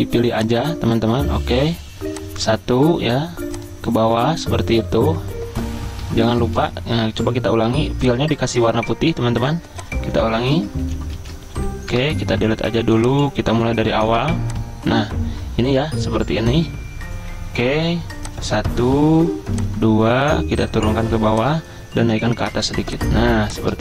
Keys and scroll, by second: 6.3 d, 6.6 d, 10.9 ctrl+z, 11.2 ctrl+z, 11.9 Delete.